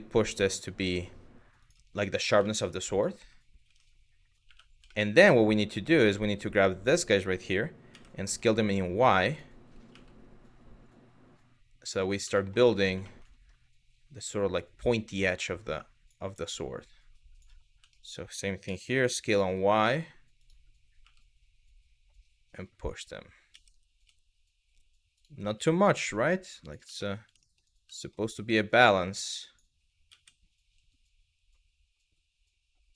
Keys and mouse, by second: 1.2 click, 2.1 shift+middle click, 3.3 \, 4.1 1, 4.6 shift+middle click, 4.9-6.5 drag, 7.5 s, 7.9 y, 8.9 click, 11.5 click, 12.0 middle click, 12.7 shift+middle click, 14.2-15.7 drag, 16.2 click, 17.6 shift+middle click, 18.3 s, 19.0 y, 20.0 click, 22.5 click, 23.2 s, 24.8 click, 26.2 click, 26.6 shift+middle click, 27.1 shift+middle click, 27.6 shift+middle click, 28.5 click, 29.7 s, 30.2 y, 32.5 click.